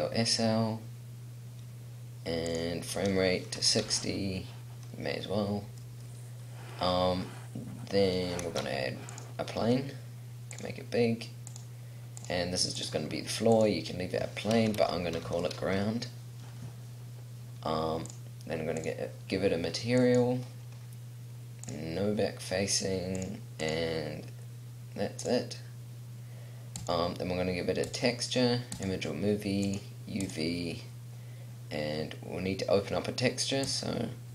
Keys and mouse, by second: 8.7 shift+a, 9.9 s.